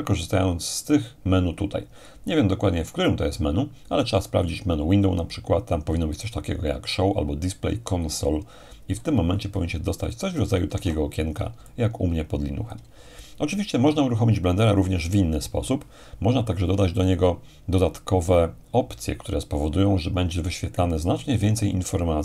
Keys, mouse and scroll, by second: 0.8-1.9 drag, 10.1-11.1 drag, 11.1 alt+Tab, 11.7-13.7 alt+drag.